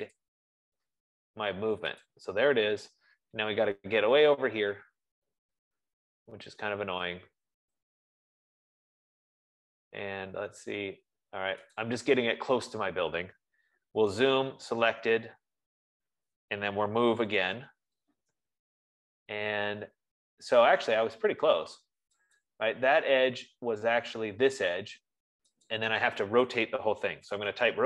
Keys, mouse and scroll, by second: 0.5 click, 2.5 click, 2.7 F15, 3.1-3.6 scroll, 4.5-5.3 scroll, 5.3-9.0 scroll, 9.6-10.3 scroll, 10.3 scroll, 11.3-11.6 scroll, 12.1 click, 14.2-15.7 typing, 17.2-18.4 typing, 19.6 middle click, 19.9 middle click, 22.9 click, 23.8 middle click, 24.4 middle click, 24.6-24.9 scroll, 26.1 click, 27.4-27.8 typing, 27.6 scroll.